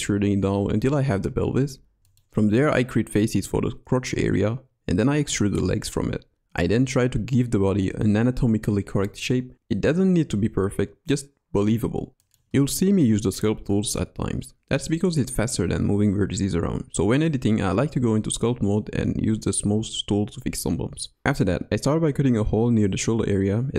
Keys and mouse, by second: 1.6 shift+2, 2.7 f, 3.4 click, 3.7 e, 6.4 e, 7.6 g, 9.9 g, 11.5 g, 13.5 middle click, 14.1 middle click, 14.3 middle click, 14.5 middle click, 15.3 middle click, 16.0 middle click, 17.1 middle click, 17.7 middle click, 17.8 click, 18.0 middle click, 19.1 middle click, 19.4 middle click, 19.6 middle click, 19.9 middle click, 20.2 middle click, 20.5 middle click, 20.7 click, 21.6 x, 23.6 click.